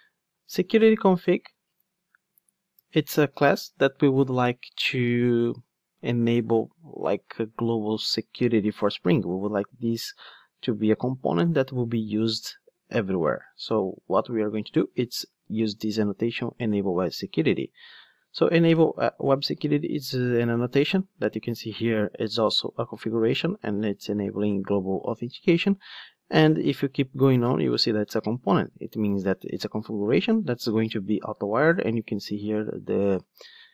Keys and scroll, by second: 16.6 Return, 19.4 super+b, 26.5 super+b.